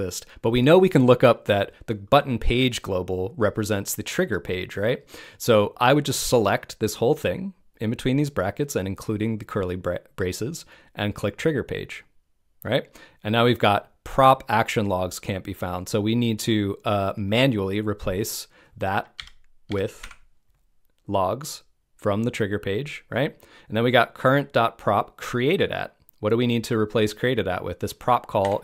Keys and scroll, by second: 19.1 BackSpace.